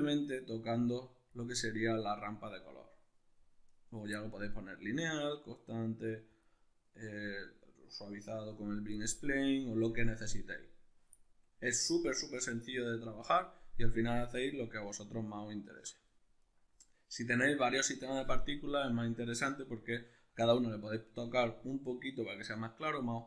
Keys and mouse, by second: 15.3-16.4 ctrl+middle drag, 16.4 right click.